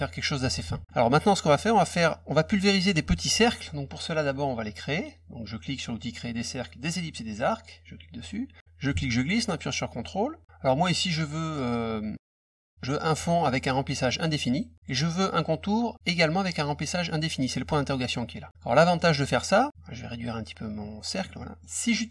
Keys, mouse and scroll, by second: 0.4 F1, 0.8 middle click, 1.2 middle click, 3.4 middle click, 7.4 click, 8.6-10.4 ctrl+drag, 14.2 click, 14.7 click, 17.0 click, 18.5 click, 18.9 middle click, 19.7-21.1 ctrl+drag, 21.4 middle click.